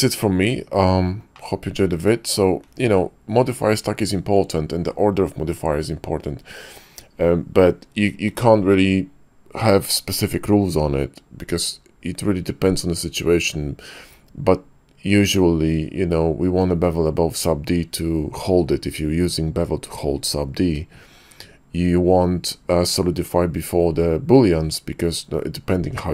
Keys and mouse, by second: 1.3-2.3 middle drag.